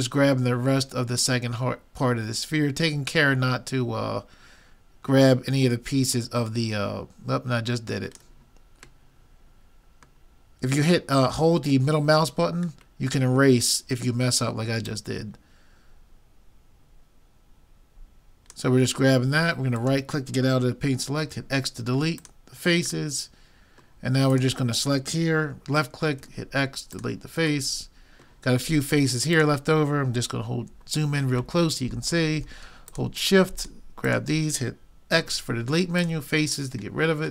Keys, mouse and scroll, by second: 21.3 x, 23.1-24.3 middle drag, 24.3-26.0 drag, 26.2 x, 27.7-29.4 middle drag, 29.4-31.0 drag, 30.9-33.9 middle drag, 32.9-35.7 drag, 35.2 x, 36.5-37.3 middle drag.